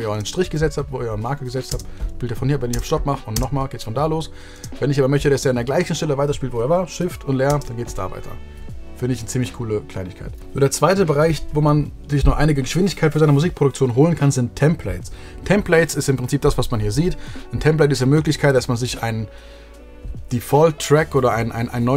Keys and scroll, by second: 0.1 space, 7.4 shift+space.